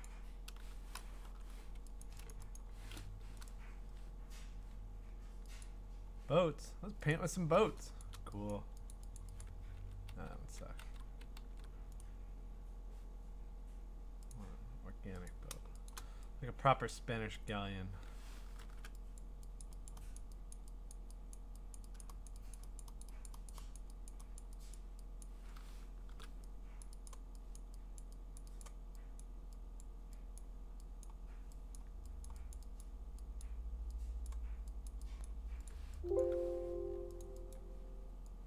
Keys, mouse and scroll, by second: 0.0 click, 2.0 click, 2.3 click, 2.6 click, 3.5 right click, 4.2 scroll, 5.6 middle click, 5.6 click, 6.3 middle click, 7.1 click, 8.0 click, 8.5 click, 8.9 click, 9.2 click, 9.4 click, 9.8 ctrl+z, 10.1 ctrl+z, 10.8 ctrl+z, 11.4 ctrl+z, 12.0 right click, 12.7-14.1 scroll, 14.3 click, 15.3 click, 15.9 click, 16.9 click, 17.5 click, 18.6 !, 19.2 click, 19.6 click, 19.9 click, 20.2 click, 20.5 click, 20.9 click, 21.3 click, 21.7 click, 22.0 click, 22.3 click, 22.5 click, 22.8 click, 23.0 click, 23.3 click, 23.5 click, 23.8 click, 24.1 click, 24.4 click, 24.7 click, 25.2 click, 26.1 ^, 26.8 click, 27.1 click, 27.6 click, 28.0 click, 28.4 click, 28.6 click, 29.2 click, 29.8 click, 30.4 click, 31.0 click, 31.8 click, 32.3 click, 32.5 click, 32.8 click, 33.4 click, 34.3 click, 34.9 click, 35.2 click, 35.7 click, 36.2 click, 37.2 click, 37.5 click.